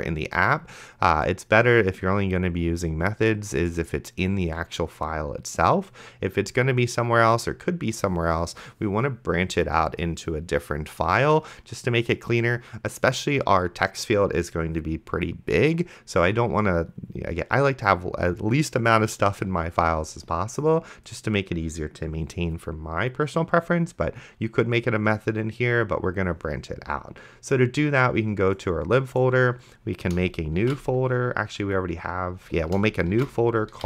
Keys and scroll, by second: 30.8 ctrl+shift+f, 31.6 Escape, 33.5-33.8 typing.